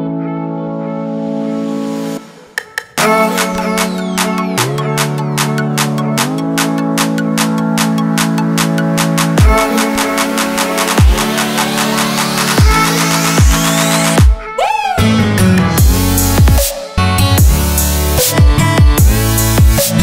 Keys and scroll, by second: 0.1 super+z, 3.2 w, 6.0 w, 8.1 q, 11.1 q, 12.1 m, 16.0 Escape, 19.3 super+z.